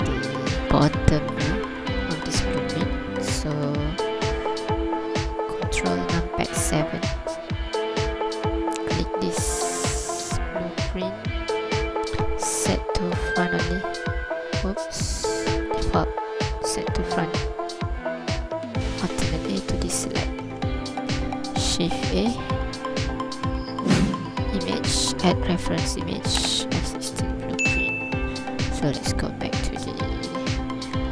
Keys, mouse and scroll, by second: 2.7-3.8 scroll down 2, 3.2-3.8 scroll up 1, 6.0 ctrl+KP_7, 8.4 right click, 13.2 click, 15.7 click, 16.7 click, 17.4 scroll down 2, 19.1 alt+a, 19.3-19.6 scroll up 2, 19.8 ctrl+click, 20.4 scroll up 1, 20.8 ctrl+click, 21.7 shift+a, 27.6 scroll down 3, 28.6 KP_3, 29.5 scroll up 2, 30.0 ctrl+click.